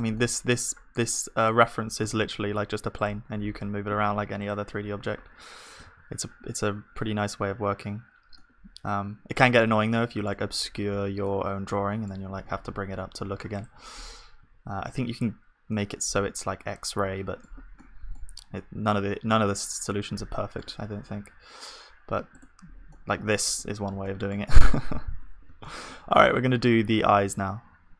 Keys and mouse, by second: 2.1 g, 3.3 r, 5.0 middle click, 5.8 ctrl+s, 12.4 g, 14.5 ctrl+s, 22.9-24.3 drag, 22.9-24.3 middle drag, 23.6 KP_1, 26.2 shift+a.